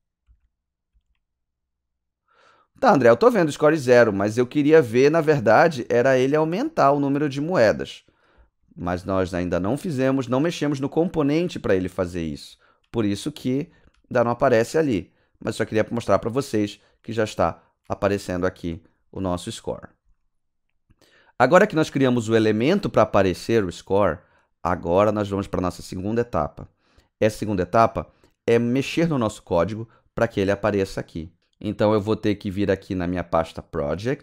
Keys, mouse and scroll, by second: 0.0-1.4 typing, 5.8-9.8 typing, 11.0-14.9 typing, 16.9 a, 19.7 click, 22.6 click, 24.6 click.